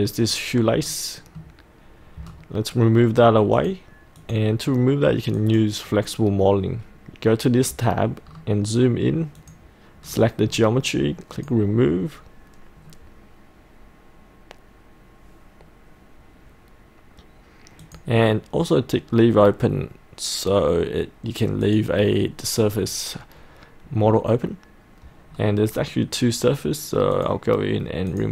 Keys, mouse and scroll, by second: 0.3-0.6 scroll down 1, 0.9 middle click, 2.3-3.1 scroll down 1, 3.6 click, 8.3-8.9 scroll down 1, 9.4 click, 10.1-11.4 scroll up 2, 11.4-19.0 drag, 25.3-27.2 scroll down 1, 27.2-28.3 drag.